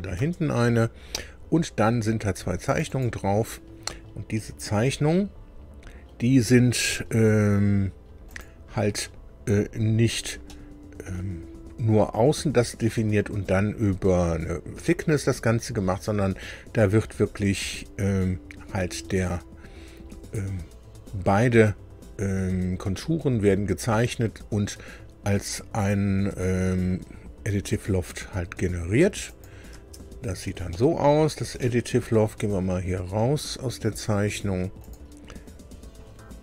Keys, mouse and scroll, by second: 0.1 space, 2.6 click, 8.2 click, 9.8 scroll up 1, 10.4 shift+middle click, 25.8 click, 29.2 click, 29.8 space, 30.7 middle click, 31.6 shift+middle click, 34.8 click.